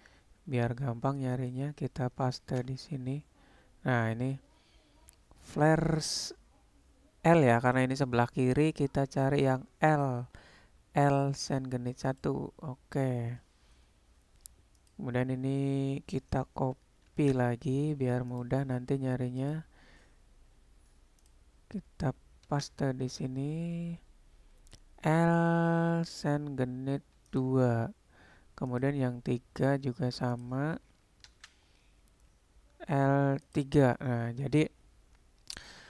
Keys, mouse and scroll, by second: 14.8-18.4 drag, 19.4 click, 21.3-27.5 drag, 28.7 click, 30.5-33.7 drag.